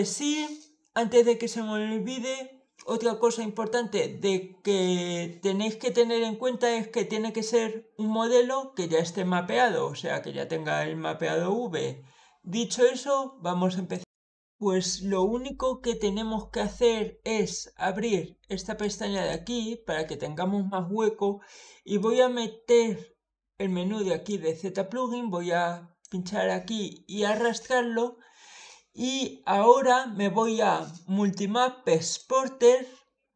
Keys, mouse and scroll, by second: 13.8 click, 18.6 click, 19.0 click, 21.8 click, 24.1-25.8 drag, 31.8 click.